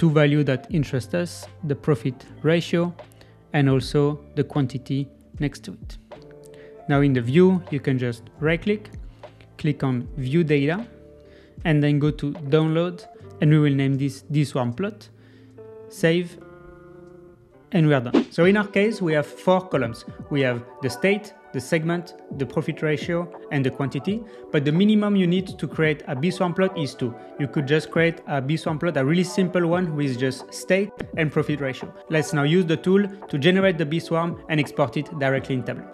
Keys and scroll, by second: 16.3 Return.